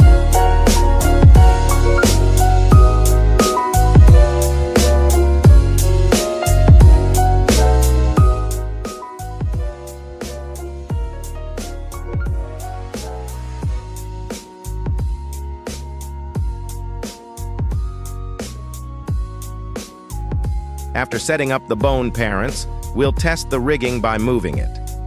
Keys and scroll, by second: 21.5 ctrl+Tab, 22.6 n, 23.6 r, 24.8 Escape.